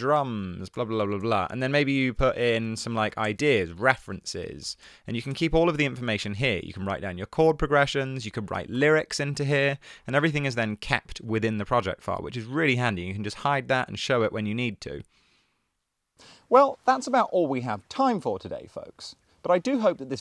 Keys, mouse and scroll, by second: 0.0-5.8 typing, 8.9 Return.